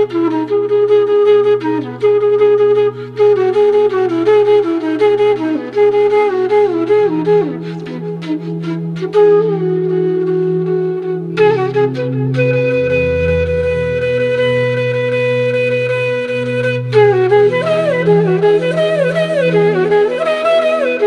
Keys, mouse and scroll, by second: 0.8 click, 2.8 shift+click, 3.8-7.1 drag, 7.3-7.9 scroll down 1, 8.3 click, 9.6-14.5 drag, 14.5 click, 16.9 click, 18.6-19.9 drag, 20.0-21.0 drag.